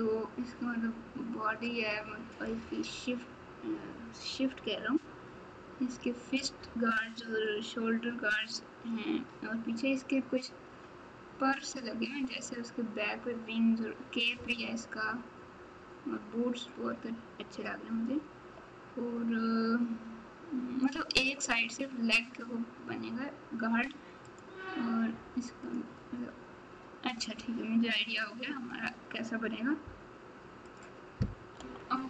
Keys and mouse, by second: 24.3 click, 30.6 click.